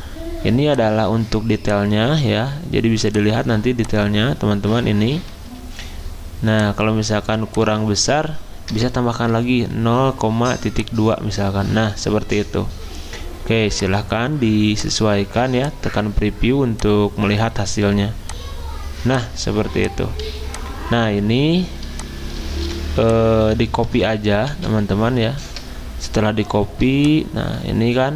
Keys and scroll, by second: 8.7 BackSpace, 9.6 BackSpace, 20.2 z, 21.9 v, 24.5 ctrl+c.